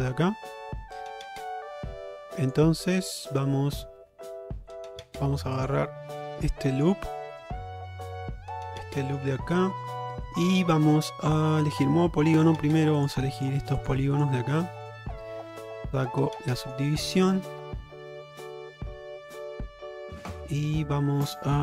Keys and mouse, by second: 6.8 alt+click, 8.7 middle click, 10.2 shift+middle click, 10.6 middle click, 12.5 3, 13.4 shift+click, 13.9 shift+click, 14.7 middle click, 15.9 click, 16.5 shift+middle click, 17.0-21.6 middle drag.